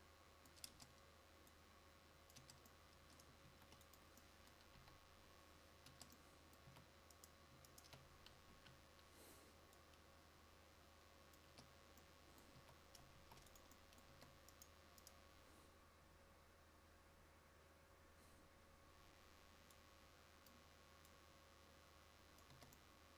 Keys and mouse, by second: 2.4 Tab, 3.6 ctrl+s, 4.8 KP_1, 6.0 Tab, 6.7 a, 8.6 KP_1, 11.6 Tab, 12.7 a, 13.2 ctrl+s, 14.2 Tab, 22.6 Tab.